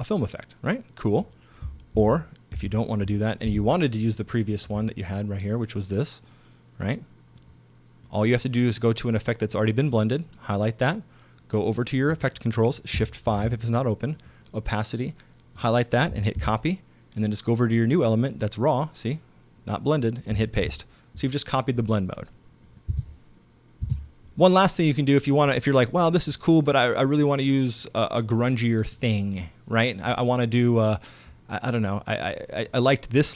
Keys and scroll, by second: 2.0 super+z, 13.3 shift+5, 16.4 super+c, 20.6 super+v, 22.9 space.